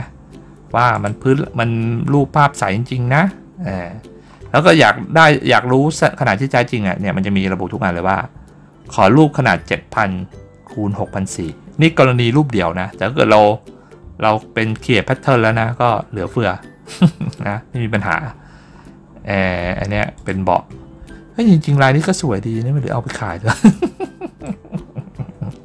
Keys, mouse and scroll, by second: 0.8 click, 1.9 scroll up 1, 2.5 scroll down 1, 4.1 scroll down 1, 5.5 scroll up 1, 16.7 middle click, 17.0 scroll up 1, 17.1 middle click, 17.8 middle click, 18.1 middle click, 18.9 middle click, 20.0 click, 21.1 scroll down 1, 22.0 scroll down 1, 22.6 scroll down 1, 23.6 click, 24.6 scroll up 1.